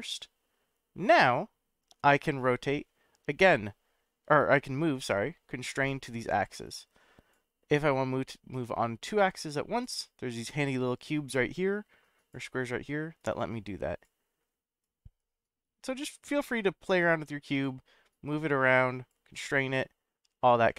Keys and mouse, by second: 2.4-5.9 drag, 6.7 click, 8.5-9.8 drag, 11.2-12.3 drag, 13.2 click, 14.8-17.6 drag, 18.3 click, 19.8-20.7 drag.